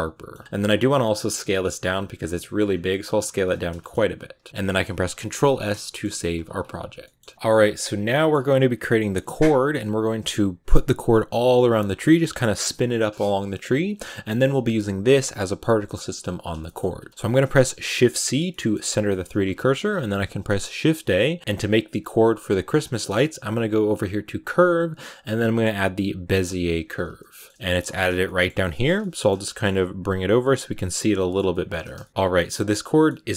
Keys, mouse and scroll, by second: 0.2 scroll down 2, 0.4 scroll up 3, 0.7 s, 2.0 scroll down 5, 2.2 middle click, 2.5 scroll up 4, 2.7 s, 3.7 shift+middle click, 3.8-4.2 scroll up 5, 4.2 a, 4.4-14.6 shift+middle drag, 14.6-16.5 right drag, 16.5 shift+middle click, 17.0-17.7 scroll down 2, 17.7 shift+c, 18.3 middle click, 18.7 scroll up 4, 19.0 shift+middle click, 19.3-26.4 scroll up 2, 27.0 shift+middle click, 27.8-28.6 scroll up 3, 28.1 middle click, 28.6 shift+middle click, 29.5-29.9 shift+scroll up 5, 29.9 g, 30.8 middle click, 31.6-32.3 scroll up 3, 31.9 shift+middle click, 32.3-33.3 middle drag.